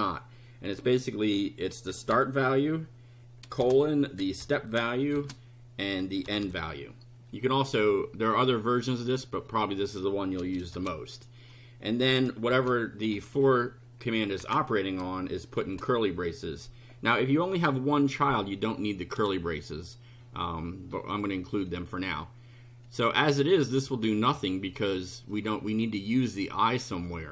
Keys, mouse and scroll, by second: 1.7-2.6 typing, 3.6-6.7 typing, 9.4 click, 10.4 space, 10.7 shift+0, 12.5 shift+[, 14.0 End, 14.4 Return, 15.6 shift+], 21.4 click, 24.6 click, 25.3 click.